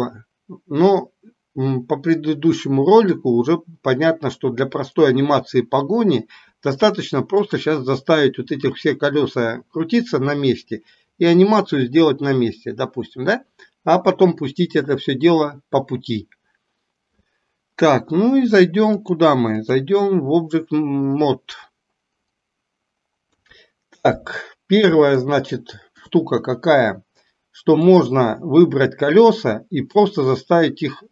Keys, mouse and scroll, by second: 7.4 click, 19.0-19.9 drag, 23.2 KP_3, 25.2-26.2 shift+middle drag, 27.9 click.